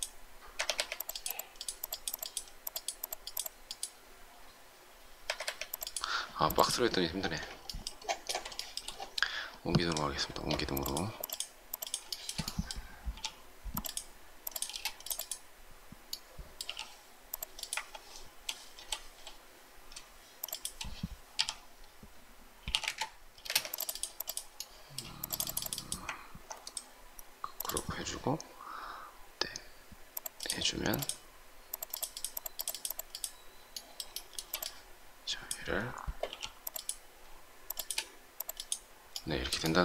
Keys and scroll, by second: 0.5 Escape, 0.7 Escape, 5.1 Escape, 5.3 Escape, 13.0 shift+p, 14.6 space, 16.6 m, 21.3 shift+/, 22.5-23.3 typing, 23.4 Escape, 36.2 m.